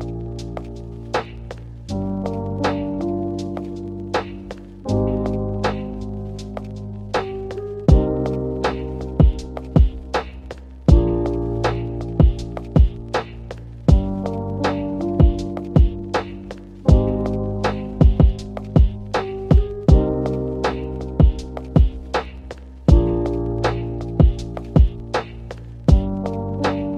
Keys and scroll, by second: 14.5 space, 15.0 m, 20.7 shift+1, 21.1 Return, 21.7 2, 21.9 Return.